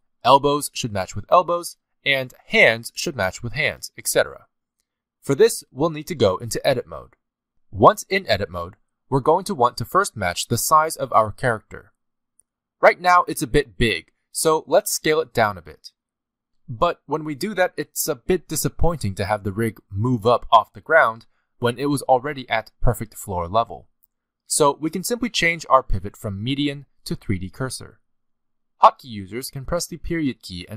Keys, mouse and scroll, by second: 5.0-5.6 scroll down 2, 5.1 middle click, 6.0 scroll down 1, 6.7 click, 9.6-10.0 scroll down 1, 10.5 shift+middle click, 11.5 middle click, 12.3-12.8 scroll up 1, 13.2 shift+middle click, 14.9 s, 22.0 middle click, 22.8 ctrl+z, 23.2 shift+middle click, 23.6 middle click, 24.3 shift+middle click, 26.6 click.